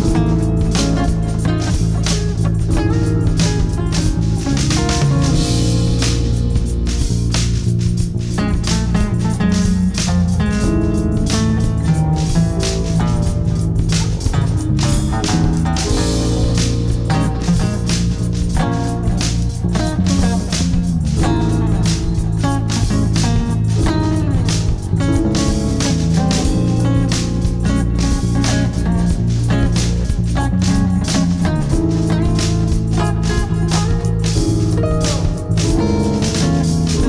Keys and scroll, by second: 0.3 Escape, 3.3 Escape, 3.7 F3, 8.3 shift+a, 9.1 shift+l, 10.1-12.9 typing, 13.3 shift+Return, 14.7-19.5 typing, 20.1 ctrl+space, 22.1 ctrl+k, 25.5 m, 25.7 Return, 29.2 shift+F2, 29.7 F3, 30.2 Escape, 30.6 F2.